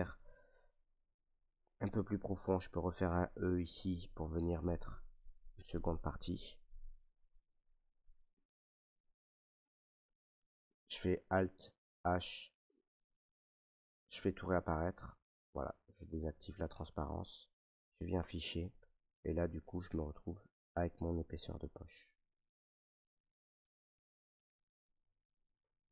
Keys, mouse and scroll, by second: 4.0 e, 4.0-8.9 drag, 9.2 middle click, 9.4 middle click, 9.5 middle click, 11.6 alt+h, 16.2 click, 18.0 middle click, 18.1 Tab, 18.5 middle click, 18.5 middle click, 20.4 middle click, 21.4 middle click, 21.5 middle click, 21.7 middle click, 23.9 middle click, 24.1 middle click, 24.9 middle click, 25.0 middle click, 25.1 middle click, 25.5 Tab.